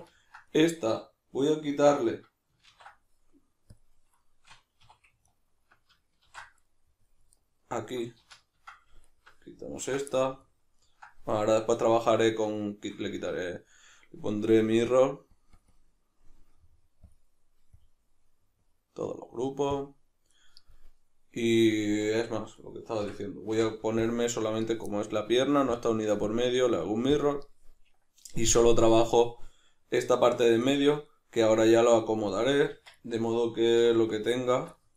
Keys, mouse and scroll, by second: 0.9 a, 2.7 ctrl+e, 4.8 2, 5.2 alt+right click, 6.2 ctrl+x, 6.6-7.3 middle drag, 7.3 alt+right click, 8.2 ctrl+z, 9.0 alt+right click, 9.8 ctrl+x, 10.1-14.8 ctrl+middle drag, 13.1 Tab, 14.8-17.2 drag, 17.8 drag, 18.6-22.6 drag, 21.8 Tab, 22.6 right click, 23.0 l, 23.5 x, 25.7 click, 26.2-28.9 drag, 29.6-34.3 middle drag, 32.7 Tab, 33.8 3, 34.3 alt+right click, 34.8-34.9 middle drag.